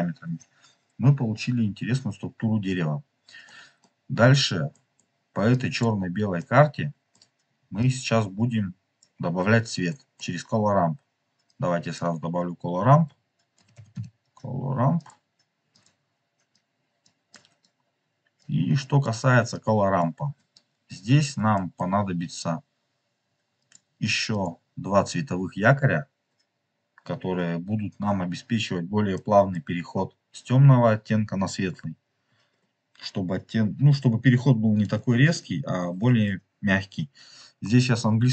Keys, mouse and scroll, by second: 2.9-3.3 scroll down 4, 3.4 middle click, 4.6 middle click, 5.4 click, 6.3 middle click, 7.7 click, 9.8 click, 9.9 middle click, 11.3 click, 15.7 click, 16.5 click, 17.2 click, 18.3 click, 19.5 click, 20.2 scroll up 2, 20.9 scroll up 1, 21.2 scroll down 2, 21.4 middle click, 21.9 scroll up 3, 23.5 click, 24.3 click, 29.0 middle click.